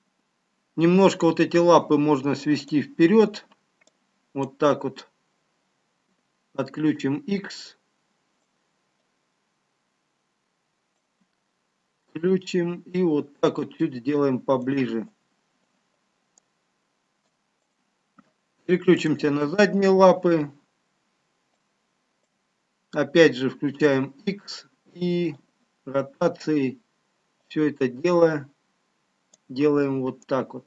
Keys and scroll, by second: 9.8 x, 15.0 x, 27.4 x.